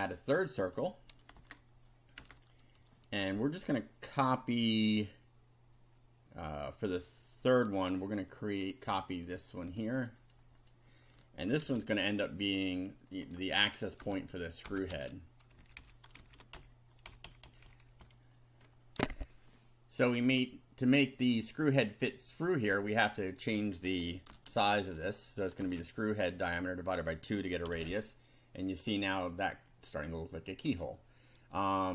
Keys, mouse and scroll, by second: 0.6 click, 1.4 Return, 2.2 Return, 9.3 click, 10.0 click, 10.6 click, 11.6 ctrl+c, 12.1 ctrl+click, 13.2 click, 14.0 BackSpace, 14.8 ctrl+BackSpace, 14.9 ctrl+v, 15.6 Up, 16.1 shift+Up, 16.2 shift+Down, 16.5 shift+Delete, 18.9 ctrl+r, 20.0 click, 22.9 click, 24.3 ctrl+c, 24.9 ctrl+click, 25.6 ctrl+v, 27.7 F5, 29.7 click.